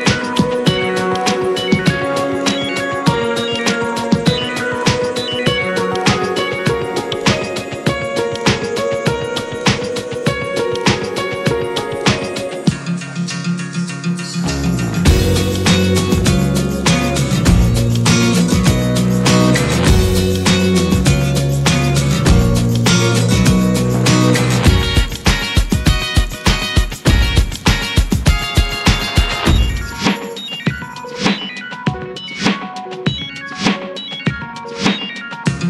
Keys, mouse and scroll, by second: 5.8-9.4 drag, 9.5-12.3 drag, 12.8 click, 13.6-14.9 scroll up 17, 14.9-15.4 shift+middle drag, 15.4 `, 16.0-17.7 middle drag, 17.7-18.0 scroll up 1, 18.0-19.0 middle drag, 19.0 click, 19.4 ctrl+1, 19.7 drag, 20.1-21.8 middle drag, 21.8 click, 23.9-26.6 middle drag, 26.6 click, 27.8 click, 28.3 click, 28.7-31.2 drag, 31.5-32.2 scroll down 2, 32.2 drag, 32.5-32.9 scroll down 5, 33.2-34.3 drag, 34.6-35.6 middle drag.